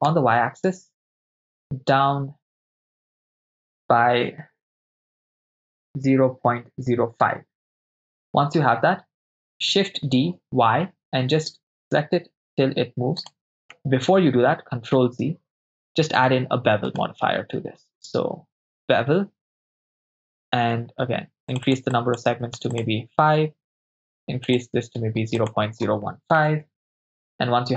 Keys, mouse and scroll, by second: 0.1 y, 5.9 0, 6.3 ., 6.8 0, 7.0 5, 7.6 Return, 9.8 shift+d, 10.4 y, 13.3 ctrl+click, 13.8 ctrl+z, 16.2-16.8 drag, 16.9-19.7 drag, 21.5 click, 21.9 click, 22.8 click, 24.5-26.6 drag.